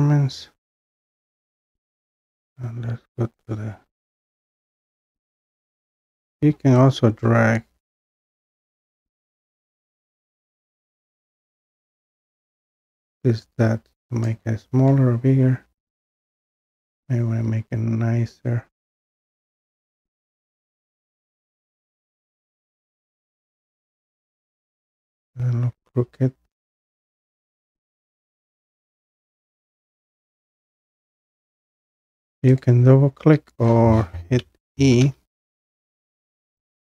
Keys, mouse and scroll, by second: 9.9 drag, 14.3 click, 15.9 click, 19.8 click, 20.7 click, 23.5 click, 24.9-25.5 scroll, 25.5-26.7 scroll down 5, 27.9 click, 29.8 click, 30.6-33.3 drag, 35.0 e.